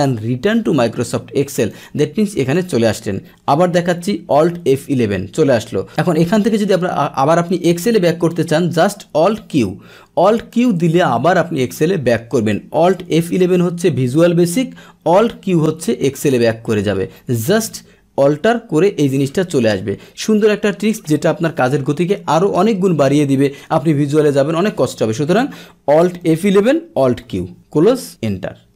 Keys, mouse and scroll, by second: 0.6 click, 1.7 click, 9.4 alt+q, 10.5 click, 13.1 alt+F11, 15.3 alt+q, 26.3 alt+F11, 27.3 alt+q.